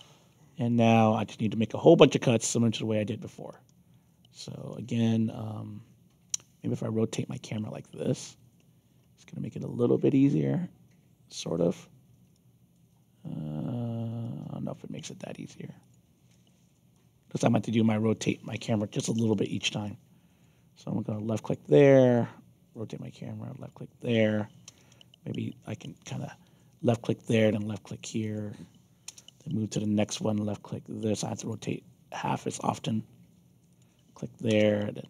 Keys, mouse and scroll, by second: 0.6-3.0 alt+drag, 3.5 alt+middle click, 4.3 alt+middle click, 6.3-7.9 alt+drag, 8.5 alt+middle click, 9.1-11.7 alt+drag, 12.3 alt+click, 14.2 alt+click, 15.8 click, 16.3 alt+click, 16.9 alt+click, 18.1 click, 18.9 Return, 19.8 alt+click, 21.4 click, 21.7 alt+click, 23.5 click, 24.6 Return, 25.8 click, 26.8 alt+click, 28.2 click, 29.0 Return, 29.8 alt+click, 31.4 click, 32.1 alt+click, 33.6 click, 34.4 Return.